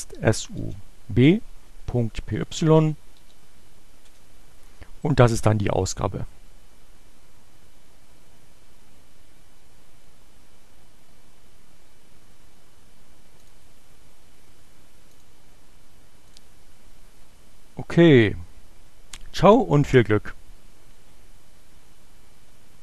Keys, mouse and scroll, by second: 1.5-2.4 typing, 4.1 Return, 13.4 click, 14.7 click, 16.3 click.